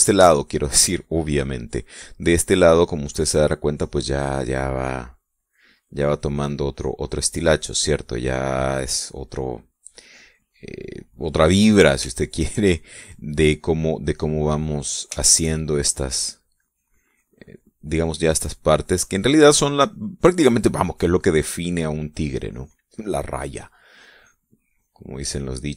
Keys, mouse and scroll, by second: 0.1 shift+middle click, 0.8-1.5 shift+scroll up 1, 1.9 shift+middle click, 2.3 shift+scroll up 1, 2.8 shift+middle click, 3.3 shift+scroll up 1, 3.5 shift+middle click, 5.5 click, 5.8 scroll up 1, 6.3 middle click, 6.9-8.5 drag, 8.9-10.0 drag, 10.6-11.6 drag, 11.9-13.2 middle drag, 13.4 shift+middle click, 14.0-15.9 shift+middle drag, 16.4-19.9 shift+drag, 20.1-22.5 drag, 22.9-24.5 drag.